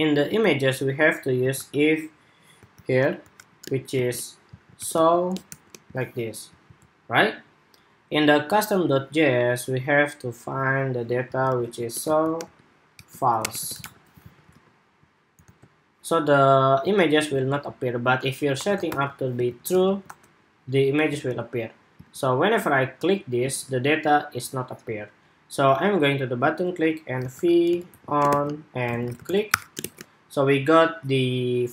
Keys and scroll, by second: 6.6 super+s, 14.1 super+s, 14.3 super+Tab, 15.2 super+r, 17.1 super+Tab, 19.4 super+s, 19.6 super+Tab, 20.0 super+r, 21.0 super+Tab, 21.8 super+Tab, 23.5 super+Tab.